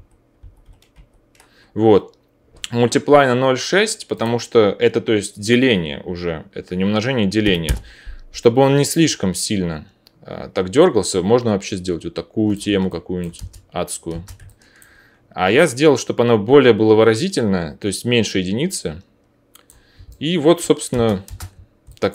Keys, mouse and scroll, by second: 0.4 ctrl+z, 0.6 ctrl+z, 0.9 ctrl+z, 4.1-12.6 middle drag, 13.4 space, 17.0-20.9 middle drag, 20.9 space.